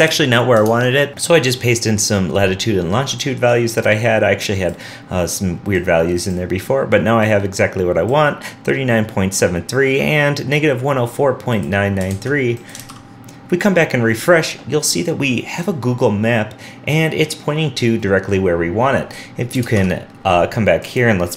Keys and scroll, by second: 0.7 super+Tab, 1.1 super+s, 12.1 super+Tab, 12.8 super+r, 19.8 super+Tab.